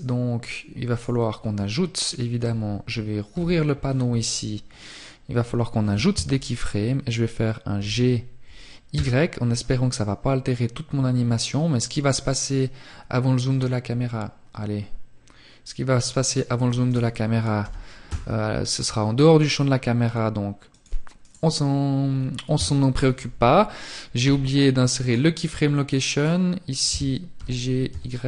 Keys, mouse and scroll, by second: 15.1 click, 15.1 right click, 15.8 g, 19.5 click, 19.5 right click, 24.4 right click.